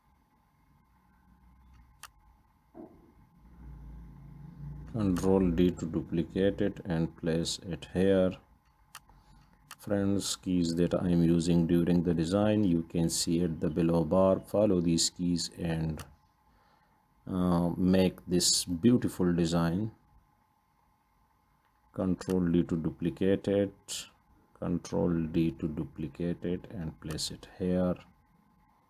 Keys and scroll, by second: 3.9 ctrl+d, 12.2 ctrl+g, 14.1 ctrl+d, 20.9 ctrl+d, 25.5 ctrl+d.